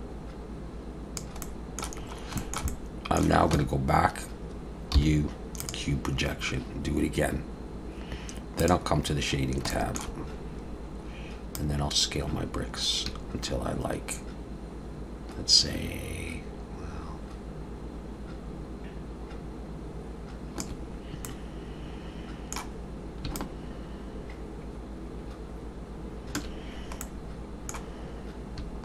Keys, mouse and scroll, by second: 1.4 middle click, 2.0-2.4 scroll up 2, 2.4 shift+middle click, 2.7 middle click, 3.5 Tab, 5.0 u.